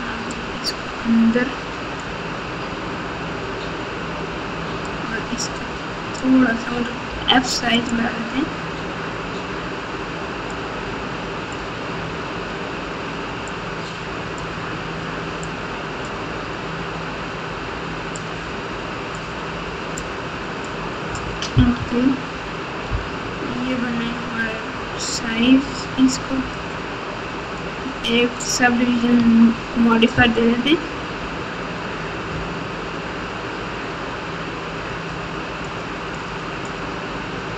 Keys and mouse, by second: 4.8-6.2 drag, 7.1 f, 10.5-11.5 drag, 13.4 click, 15.4 click, 18.1-19.1 drag, 19.9 click, 21.7 KP_3, 26.5-27.6 drag, 28.6 Tab, 29.1 Tab, 30.1 KP_1, 32.4 Tab, 34.9 click, 35.6 click, 36.1 click, 36.6 click.